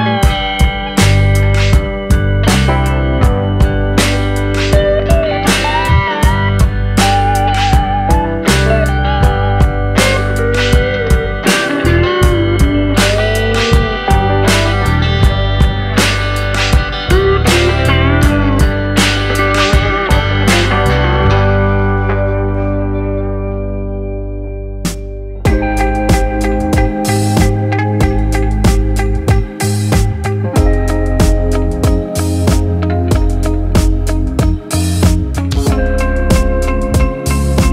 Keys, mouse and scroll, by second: 1.4 middle click, 1.8 scroll down 2, 2.1 shift+middle click, 2.4-2.7 scroll up 2, 2.7 click, 3.3 click, 4.6-4.9 scroll down 2, 4.9-6.0 middle drag, 6.0-7.1 drag, 7.1-8.7 middle drag, 8.7 click, 9.2-15.2 drag, 15.2-16.4 shift+middle drag, 16.4 click, 17.2 scroll down 2, 17.4-18.2 middle drag, 18.2-19.2 scroll up 4, 18.5 middle click, 19.2 middle click, 19.9 scroll down 2, 20.2-22.2 middle drag, 22.2 click, 24.9-25.2 middle drag, 25.2 scroll down 2, 25.4-27.4 middle drag, 27.4 alt+d, 28.3-30.3 drag, 30.9-32.4 middle drag, 32.4 r, 36.0-36.6 middle drag, 36.6-37.7 drag.